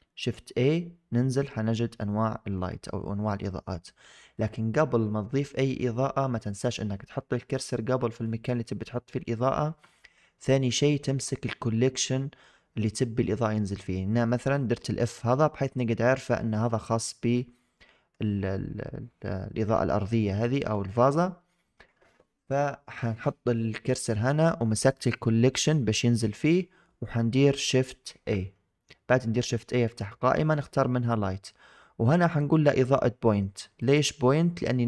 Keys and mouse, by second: 17.3-18.0 middle drag, 20.0 shift+middle drag, 20.4 middle drag, 20.8 shift+drag, 24.8 click, 26.5 middle click, 27.9 shift+a.